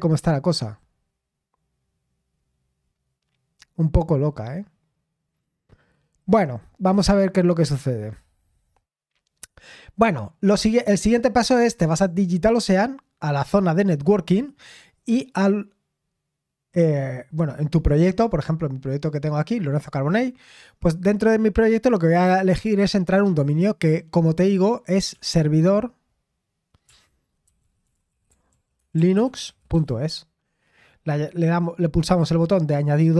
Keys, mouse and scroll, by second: 2.4-3.6 scroll up 1, 3.6-4.0 scroll down 1, 6.2-6.6 scroll up 1, 11.6 click, 15.3-17.1 drag, 21.8-23.4 drag, 25.2 typing, 26.8-29.8 typing, 31.4-33.1 drag.